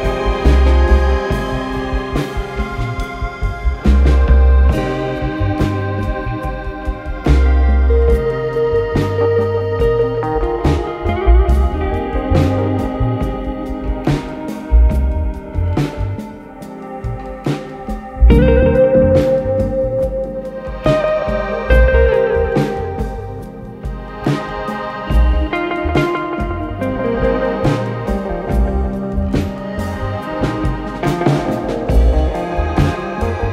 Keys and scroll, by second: 6.4 ], 7.5 4, 10.8 3, 20.8 4, 21.4 3, 23.9 4, 25.3 ctrl+d, 25.4 Escape.